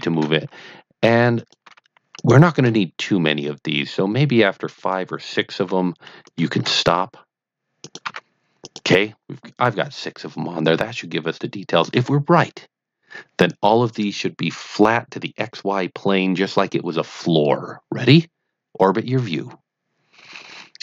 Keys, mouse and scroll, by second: 0.1 shift+a, 1.3 click, 1.6 g, 2.1 click, 2.5 shift+a, 4.7 click, 5.6 g, 6.2 click, 6.5 shift+a, 7.8 click, 8.0 g, 8.6 click, 19.0-20.8 middle drag.